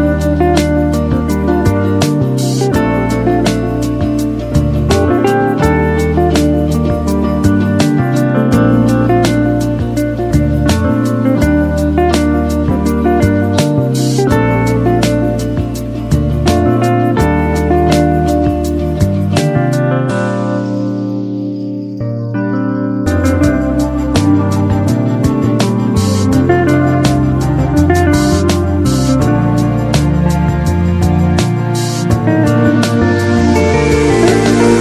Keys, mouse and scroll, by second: 3.3-3.9 drag, 15.7-16.5 typing.